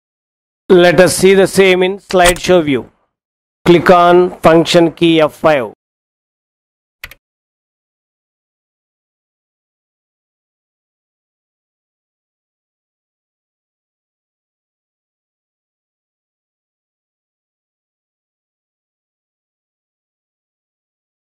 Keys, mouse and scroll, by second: 2.3 click, 6.8 F5, 10.8 Insert.